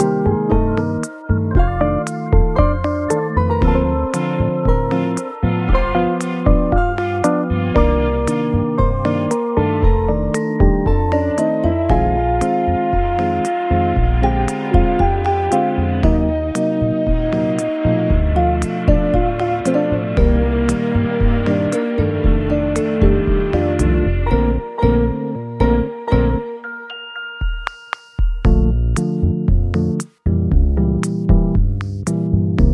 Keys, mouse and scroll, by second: 3.8 shift+a, 7.9 g, 8.2 z, 9.8 s, 12.6 3, 12.9 0, 12.9 0, 14.8 Return, 14.8 1, 15.0 0, 15.1 1, 15.1 0, 15.3 Return, 17.6 s, 19.9 g, 20.1 z, 25.4 KP_1, 27.0 shift+d, 28.3 r, 32.3 KP_9.